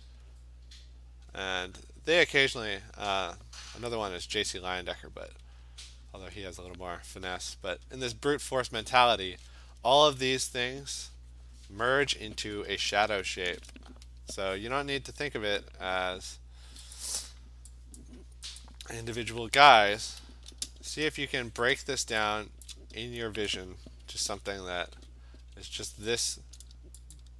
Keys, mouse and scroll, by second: 1.5 click, 1.7 click, 2.2 click, 2.6 click, 2.8 click, 3.3 click, 3.6 click, 4.2-4.7 alt+click, 5.2 click, 5.8 alt+click, 6.7 click, 8.0 alt+click, 13.2 ctrl+shift+n, 13.8 Return, 16.2 d, 17.0 click, 18.1 click, 18.6 click, 20.8 ), 22.7 [, 25.0 click, 25.4 [, 25.6 [, 26.2 click, 27.2 shift+click.